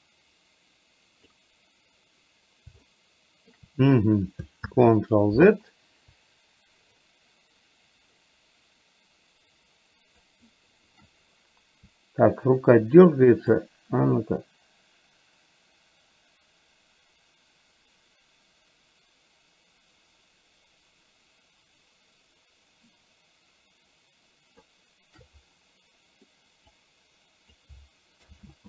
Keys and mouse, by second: 2.9 shift+middle click, 4.8 ctrl+z, 7.1-10.3 drag, 13.8 shift+click, 15.2-24.7 shift+drag, 26.8 click, 28.4 ctrl+z.